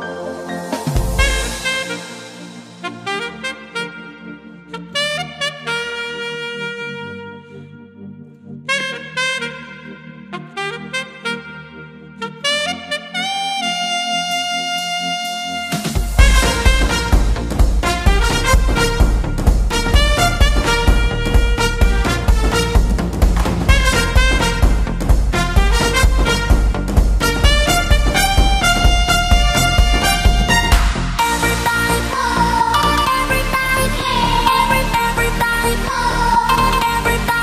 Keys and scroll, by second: 1.8 super+z, 18.5 b.